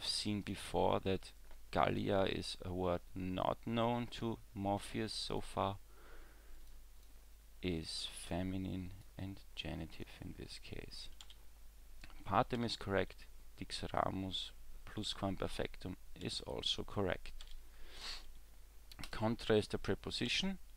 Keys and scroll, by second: 11.3 w, 12.6 w, 16.3 w, 17.4 w, 20.3 w.